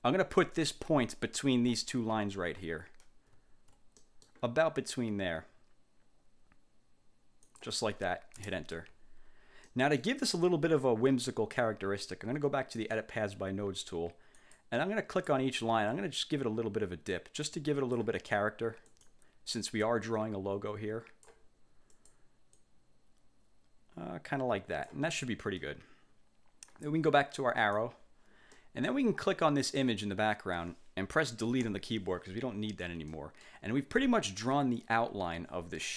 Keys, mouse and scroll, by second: 1.5-1.9 ctrl+scroll up 2, 2.8-3.2 ctrl+scroll down 2, 3.6 ctrl+scroll down 2, 4.2 ctrl+click, 7.6 click, 8.5 Return, 9.8 click, 12.9 click, 14.5 click, 15.3 click, 16.0-18.3 drag, 19.0 click, 20.2-21.6 drag, 22.0 click, 22.7-25.2 drag, 27.8 click, 28.7 click, 30.0 click, 31.8 Delete, 33.2 click.